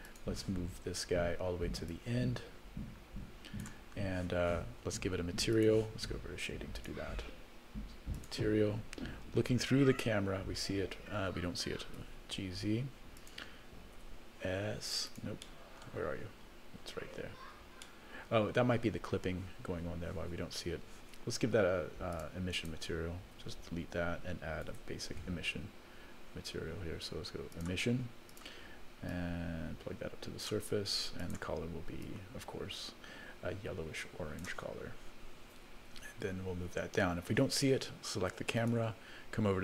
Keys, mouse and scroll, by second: 0.0 click, 1.9-3.6 drag, 5.5 click, 6.8 click, 7.4-8.1 scroll down 2, 8.1 click, 9.9 KP_0, 11.7 g, 13.9 s, 15.4 middle click, 16.0-17.0 scroll down 7, 17.4-17.8 scroll down 3, 17.8 middle click, 18.6 scroll up 2, 20.4-20.9 scroll up 1, 22.1 click, 22.5 click, 23.9 x, 24.7 shift+a, 29.1-31.0 drag, 31.2 click, 35.8 KP_0, 38.5 click.